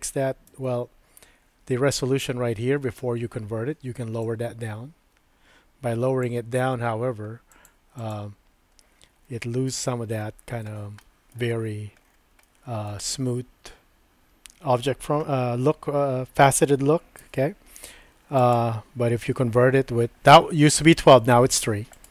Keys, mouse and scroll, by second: 0.1 super+z, 0.5 super+z, 4.4-6.3 drag, 7.6 click, 7.9 click, 9.2 middle click, 10.2 shift+middle click, 11.0 shift+middle click, 12.4 shift+middle click, 17.2 Tab, 18.4-20.2 right drag, 21.9-22.1 right drag.